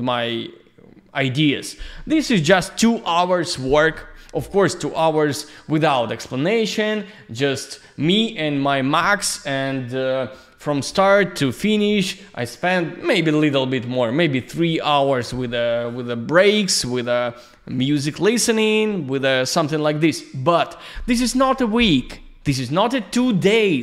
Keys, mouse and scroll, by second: 7.1 click.